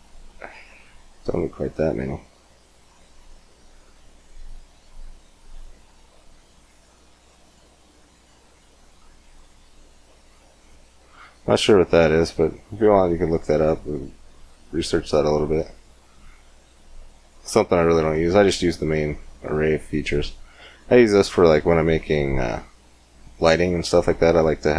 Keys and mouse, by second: 1.2-3.2 drag, 3.2-4.5 middle drag, 4.5-6.2 drag, 7.9-9.8 middle drag, 12.5-14.9 middle drag.